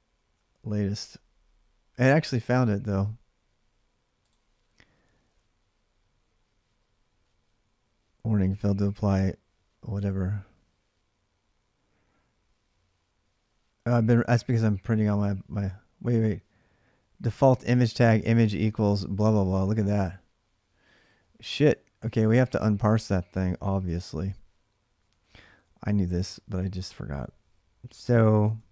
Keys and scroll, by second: 21.8 alt+Tab, 23.6 ctrl+c, 24.8 ctrl+a, 25.0 ctrl+a, 27.7 ctrl+[, 27.9 k, 28.1 k, 28.6 ctrl+a.